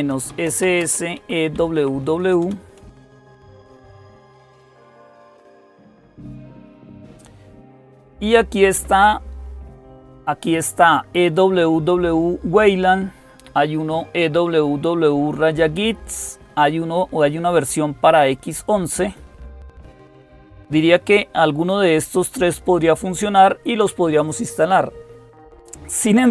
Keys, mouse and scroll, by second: 0.0-3.4 typing, 11.1-13.2 drag, 14.0-26.3 drag.